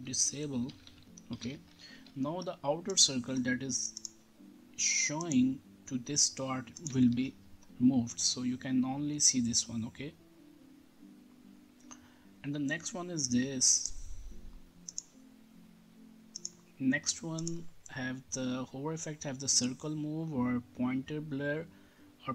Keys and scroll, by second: 0.0-1.9 typing, 1.9 ctrl+s, 7.1 ctrl+r.